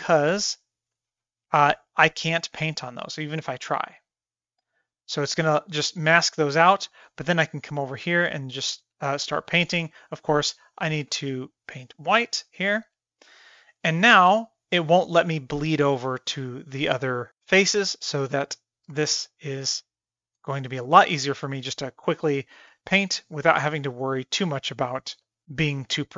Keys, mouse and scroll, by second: 0.0-0.4 middle drag, 0.6 shift+middle click, 1.1-1.9 middle drag, 2.4-3.1 middle drag, 3.9 click, 4.6 click, 4.9 click, 5.3 middle click, 6.1 middle drag, 6.8 middle click, 7.3 shift+middle click, 7.8-8.5 drag, 11.0 x, 11.5-14.2 drag, 14.5 middle click, 15.1-16.1 drag, 16.6-17.3 drag, 17.8 shift+middle click, 18.5 drag, 19.2 shift+middle click, 19.5-20.3 drag, 20.6 shift+middle click, 20.8 middle click, 21.5-22.6 drag, 22.7 f, 22.8-23.4 drag, 23.9 middle click, 24.2 shift+middle drag, 24.8 middle click, 25.3 middle click, 25.7 middle drag, 25.9 middle click.